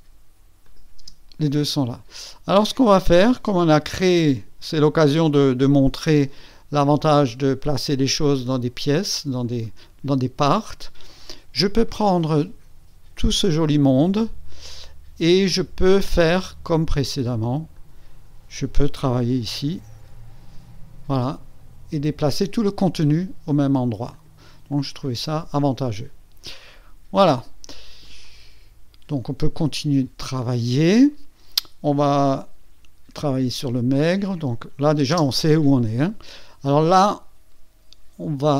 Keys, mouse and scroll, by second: 0.0 click, 0.6 click, 1.0 space, 3.9-4.7 drag, 5.8 click, 7.3 click, 9.4 ctrl+click, 10.0 ctrl+click, 17.7 click, 19.7 KP_1, 20.0 KP_4, 24.1 click, 24.7-26.2 drag, 26.4-27.4 drag, 28.0-29.5 drag, 29.7-30.7 drag, 33.9 click, 35.1 space, 36.9 click.